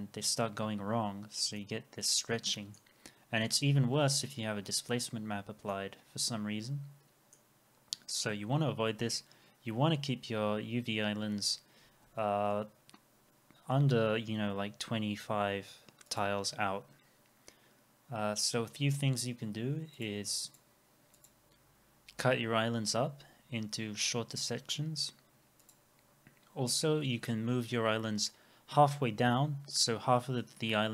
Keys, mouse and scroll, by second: 1.6 middle click, 5.7 middle click, 27.1 u.